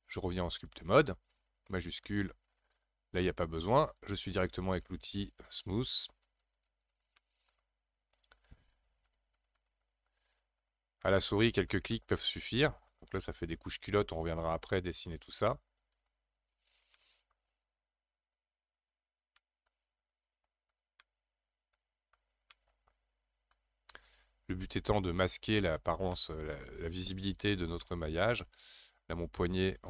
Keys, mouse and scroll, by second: 3.2 middle click, 4.0-7.2 drag, 7.2 middle click, 7.7-8.5 scroll down 1, 8.5-11.0 drag, 11.0 middle click, 11.5-17.0 drag, 17.0 middle click, 17.6-19.4 drag, 19.4 middle click, 20.0-21.0 drag, 21.0-24.1 middle drag, 24.1-26.1 drag, 26.1-28.7 middle drag, 28.7-29.4 scroll up 1, 29.4-29.8 drag.